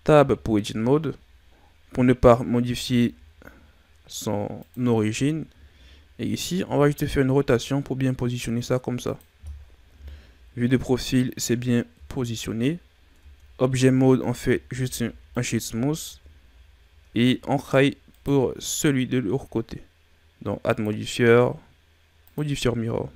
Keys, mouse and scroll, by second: 0.1 Tab, 2.6 g, 4.9-5.6 ctrl+scroll up 7, 6.6 r, 9.9 KP_3, 11.9 KP_1, 13.1 Tab, 14.4 w, 15.9 a, 16.4-17.1 scroll down 5, 17.1-17.5 ctrl+scroll down 3, 17.5-17.9 scroll up 3, 18.0 right click, 20.6 click, 22.8 a.